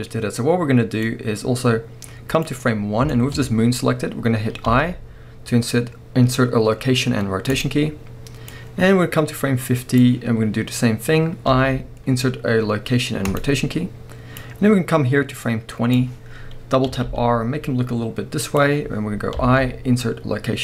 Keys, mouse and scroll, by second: 1.1-3.1 drag, 2.7-3.1 scroll up 1, 3.1-8.5 shift+middle drag, 3.4-4.7 scroll up 1, 8.5-18.6 drag, 16.8 r.